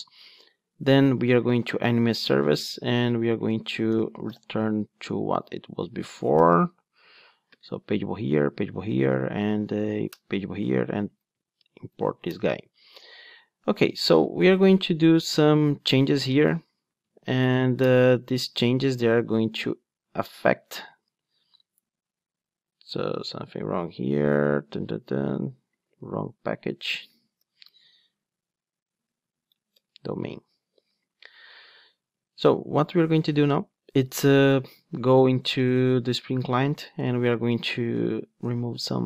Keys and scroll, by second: 7.2 Return, 12.2 alt+Return, 17.2 alt+Return, 20.9 super+b, 26.0 super+x, 27.4 alt+Return, 32.1 ctrl+Tab.